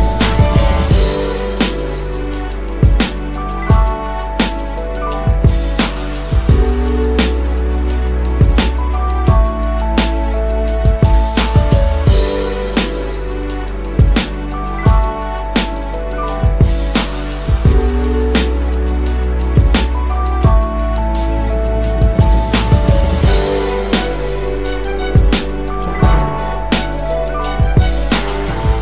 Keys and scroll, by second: 22.7 ctrl+shift+].